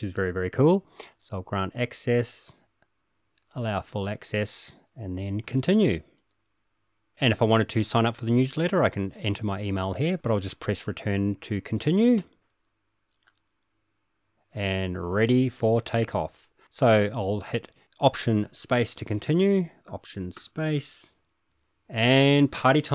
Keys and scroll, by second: 6.0 Return, 12.2 Return, 20.4 alt+space.